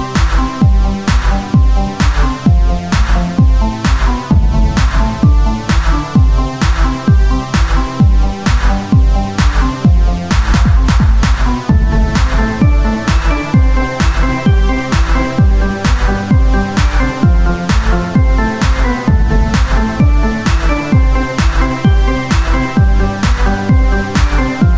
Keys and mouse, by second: 0.1 right click, 0.9 shift+d, 2.8 click, 3.5 o, 5.3 r, 5.9 z, 6.5-10.7 drag, 7.3 Tab, 10.7 KP_1, 11.3 Tab, 12.8 shift+d, 14.2-15.4 drag, 15.0 z, 15.2 right click, 16.6 KP_1, 17.0 z, 20.8 Tab, 22.9 shift+d, 23.9 KP_1, 24.2 z.